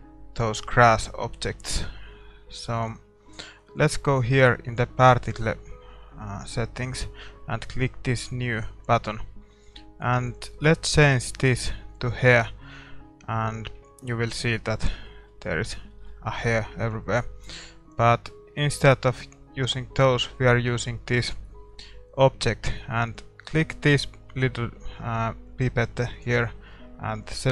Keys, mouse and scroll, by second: 8.2-13.5 drag, 13.5-21.2 middle drag, 21.2-27.5 drag.